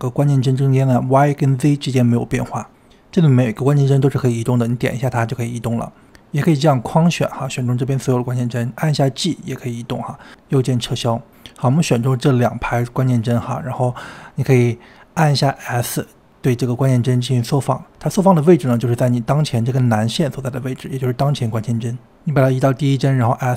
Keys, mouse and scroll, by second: 3.0 click, 5.4 g, 8.0 click, 9.0 g, 12.8 click, 15.6-17.4 drag, 17.4 s, 21.7-23.2 drag, 23.2 s.